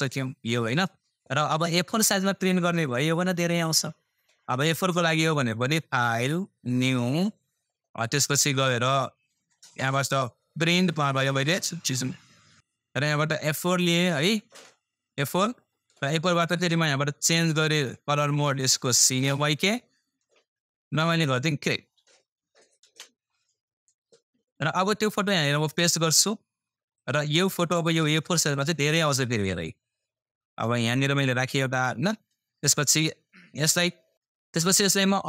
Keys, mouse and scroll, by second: 2.4 scroll up 1, 2.4 typing, 5.3 click, 5.3 click, 5.3 typing, 10.7 click, 10.7 typing, 15.1 click, 15.1 typing, 22.8 super+space, 25.2 typing, 27.1 click, 29.4 scroll up 1, 32.8 click.